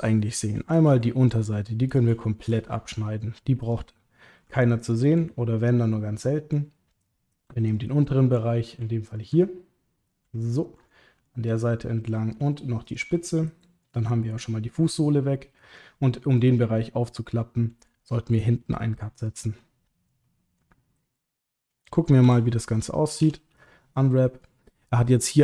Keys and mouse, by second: 1.0 ctrl+click, 2.2 shift+middle click, 2.7 ctrl+middle click, 4.7 alt+shift+click, 4.8 alt+shift+click, 5.2-6.5 middle drag, 7.7 alt+shift+click, 7.8 alt+shift+click, 9.1 alt+shift+click, 9.4 middle click, 10.5 alt+shift+click, 10.9 middle click, 11.8 middle click, 13.8-15.8 middle drag, 16.4 middle click, 18.1 click, 19.3 ctrl+click, 20.1 middle click, 21.4 middle click, 22.2 a, 23.2 u, 23.9 middle click.